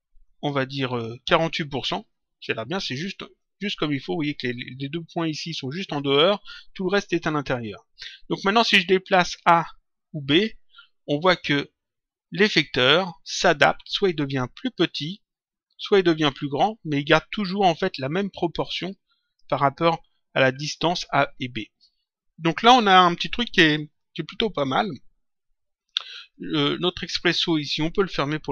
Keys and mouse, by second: 9.3 click, 11.2 click, 26.3 click.